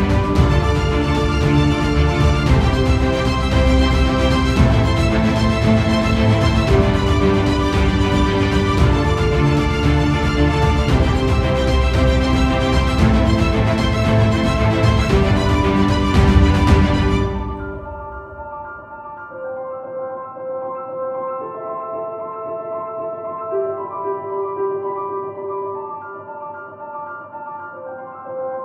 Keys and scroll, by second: 7.0 ctrl+0, 11.0 ctrl+0.